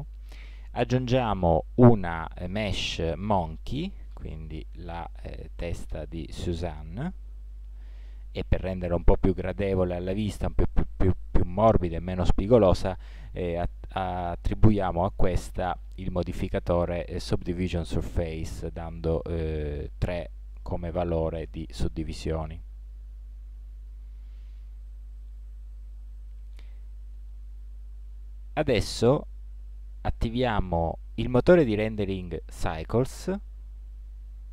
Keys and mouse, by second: 1.4 shift+a, 4.4 middle click, 7.3-12.5 middle drag, 12.5-14.3 drag, 14.3 middle click, 15.7-17.5 drag, 18.7-21.0 drag, 22.3-23.6 drag, 23.6-27.6 middle drag, 30.3-32.1 drag.